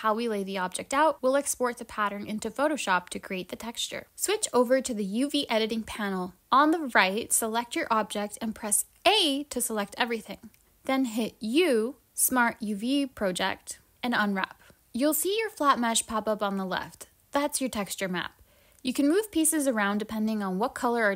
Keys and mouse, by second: 0.0 shift+click, 0.2-1.6 right drag.